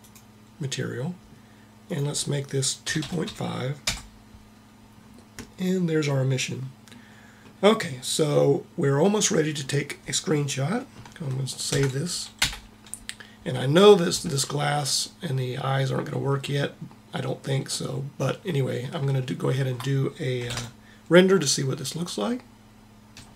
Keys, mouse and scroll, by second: 1.8-3.6 drag, 7.4-8.6 middle drag, 11.6 ctrl+s, 20.4 ctrl+Up.